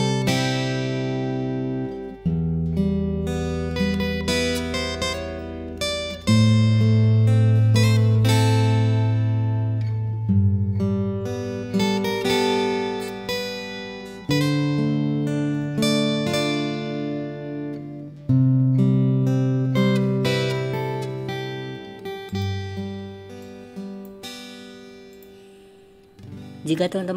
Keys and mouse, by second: 0.0 click, 0.9 click, 1.6 click, 2.2 alt+s, 4.2 shift+click, 5.2 alt+s, 6.6 click, 7.1 click, 7.7 alt+s, 8.6 click, 9.0 click, 9.5 g, 10.3 click, 10.4 g, 11.1 click, 11.4 g, 11.9 click, 12.0 g, 12.9 click, 13.1 g, 14.1 g, 15.1 click, 15.3 g, 17.0 click, 18.5 alt+s, 19.9 g, 23.5 click.